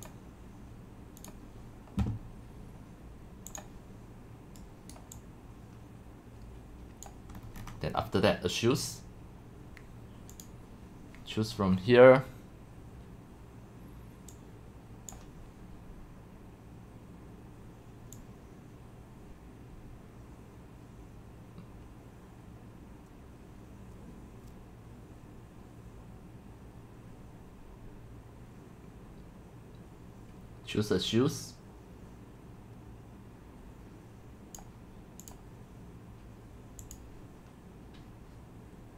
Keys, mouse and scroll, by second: 0.0 click, 0.1-4.9 drag, 5.2-5.8 drag, 6.6-7.0 drag, 7.4-9.2 scroll, 9.2 scroll, 10.3 middle click, 10.3 scroll down 1, 10.4 scroll, 11.8 middle drag, 11.8 scroll down 1, 14.3-15.1 drag, 16.9-19.2 drag, 19.2 click, 19.8-20.2 scroll down 1, 34.6-35.3 drag, 36.8-38.9 drag, 38.4 middle click.